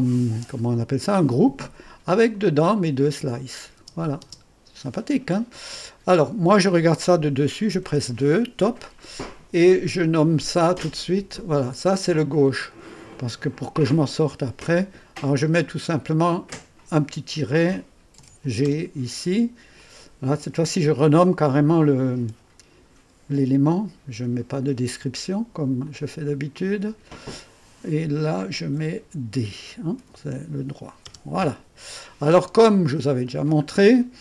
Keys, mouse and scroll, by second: 0.0 click, 2.3 click, 3.4 click, 3.8 click, 3.8-4.2 typing, 4.8 click, 7.8 typing, 10.9-12.0 drag, 15.3 click, 15.8 F2, 16.4 click, 17.4-18.7 typing, 19.8-20.5 typing, 19.8-20.8 drag, 25.8-28.0 drag, 26.3 F2, 28.7 typing, 30.0 typing, 31.0 typing, 32.6 click.